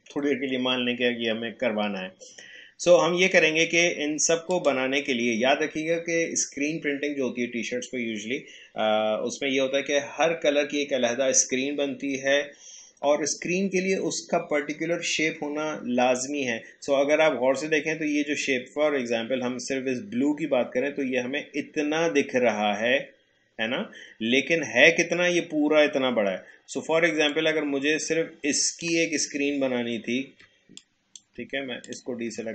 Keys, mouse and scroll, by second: 4.5 click, 27.2-29.5 drag, 29.5 Caps_Lock, 30.8 click, 31.8 click, 31.9 Caps_Lock.